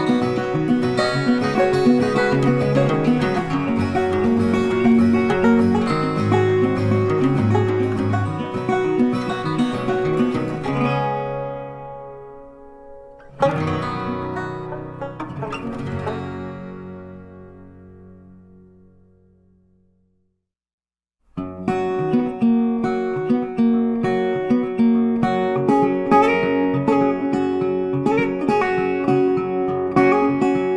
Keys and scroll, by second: 5.1 ctrl+d, 17.9 ctrl+t.